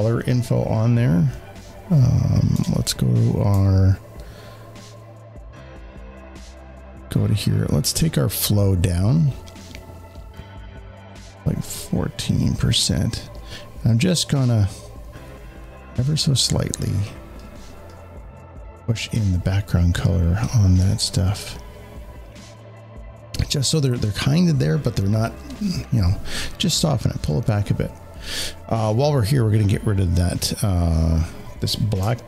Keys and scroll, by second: 2.4 w.